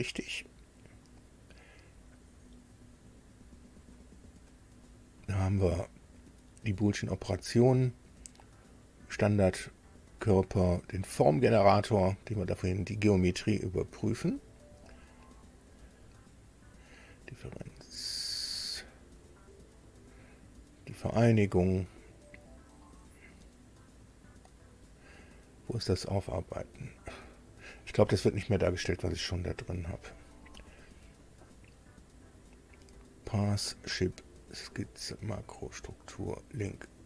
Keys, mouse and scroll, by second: 1.9-3.1 scroll down 4, 3.8-4.2 scroll up 2, 5.1-5.4 scroll up 2, 14.2-14.6 scroll down 2, 15.3 scroll down 2, 17.9-18.4 scroll down 4, 20.2 scroll down 2, 21.8 scroll down 2, 22.9-23.4 scroll down 4, 23.9 scroll down 2, 25.8-26.5 scroll down 4, 26.8-27.6 scroll down 2, 28.5-28.8 scroll up 2, 29.6-30.4 scroll up 4, 31.1 click.